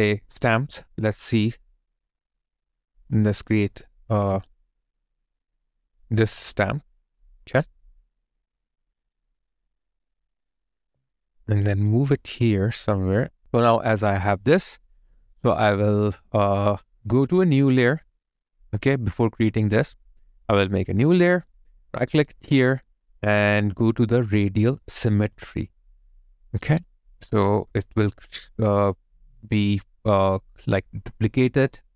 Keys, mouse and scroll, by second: 3.3-5.6 scroll down 1, 10.8 alt+click, 13.4 /, 15.7 alt+click, 21.8 right click, 26.6 alt+right click, 30.1 alt+right click, 30.2 alt+click.